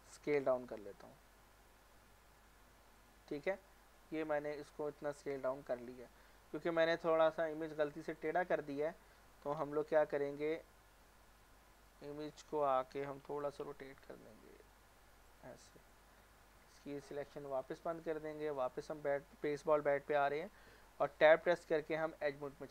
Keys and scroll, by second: 9.6 alt+z, 10.4 Tab, 13.3 r, 20.6 Tab, 21.1 Tab, 21.2-21.7 typing.